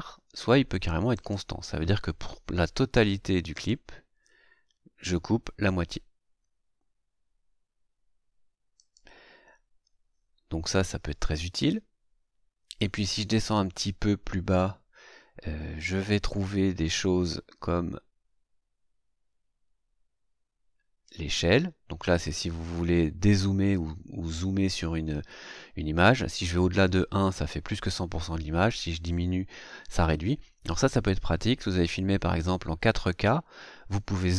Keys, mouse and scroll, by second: 1.1 click, 3.5 click, 8.7 click, 12.7-21.2 drag.